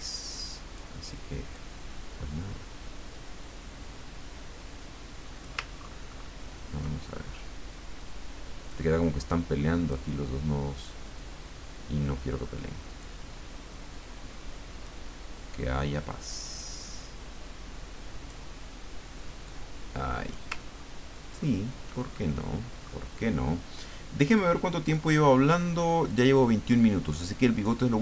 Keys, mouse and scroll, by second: 1.5-5.6 drag, 5.8-6.4 ctrl+scroll up 2, 8.7-10.2 drag, 11.4-12.3 scroll down 2, 13.0-15.5 drag, 16.4-18.5 drag, 19.5-20.5 drag, 20.8-21.2 ctrl+scroll down 1, 21.5 ctrl+scroll down 1, 22.2 ctrl+click, 24.8 click, 26.1 click.